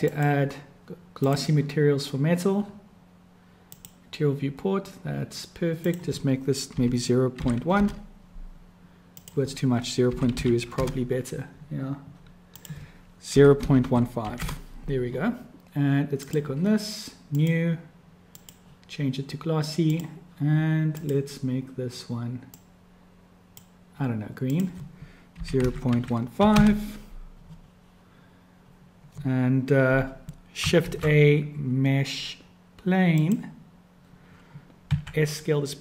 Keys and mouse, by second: 3.7 click, 5.8-12.2 drag, 12.7-15.1 drag, 16.2 click, 17.3 click, 18.3-20.0 drag, 20.8 click, 24.5-27.8 drag, 30.8 shift+a, 34.9 s.